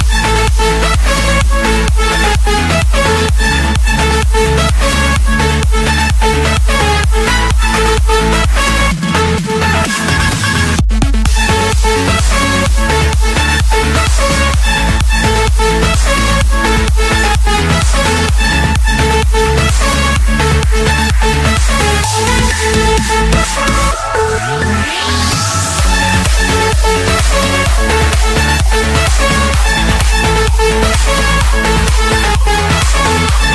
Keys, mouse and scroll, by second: 0.2 click, 0.5-1.2 scroll, 2.0 click, 2.8 click, 3.0-3.6 scroll, 4.3 click, 6.5 click, 6.7-7.4 scroll, 7.6 middle click, 8.2 middle click, 8.4 middle click, 8.8 scroll, 10.0 click, 10.3 middle click, 10.5 middle click, 11.3 middle click, 11.8 Escape, 13.4-14.1 typing, 15.2 Return, 16.5 click, 17.1 click, 17.5 click, 17.9 Return, 20.9-22.0 typing, 23.1 Return, 26.6-27.6 drag, 29.1 click, 30.1 click.